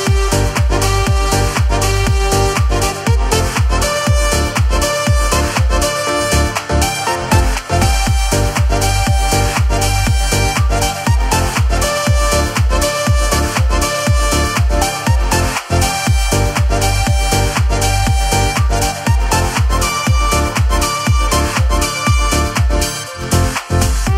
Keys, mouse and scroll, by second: 0.0-0.3 scroll up 1, 0.3 n, 0.8 shift+middle click, 8.2 scroll down 2, 8.5 shift+middle click, 11.1 g, 12.8 scroll down 3, 13.1 shift+middle click, 13.4-14.0 scroll up 3, 13.8 shift+middle click, 15.1 alt+a, 15.4 l, 18.2-18.6 scroll down 2, 18.5 shift+middle click, 19.1 scroll up 3, 19.4 shift+middle click, 19.5 shift+middle click, 22.6 alt+a, 23.7 l.